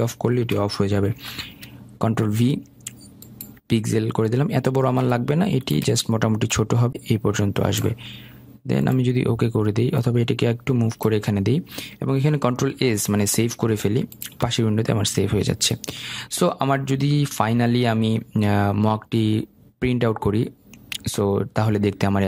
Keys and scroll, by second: 2.1 ctrl+v, 11.4 ctrl+s.